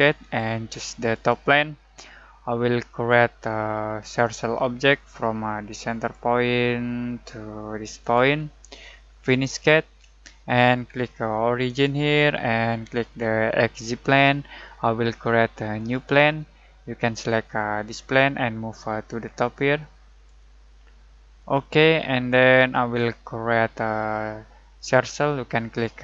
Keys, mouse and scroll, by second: 4.2 alt+click, 11.6 alt+click, 16.4-17.9 alt+middle drag, 17.9-21.4 alt+drag.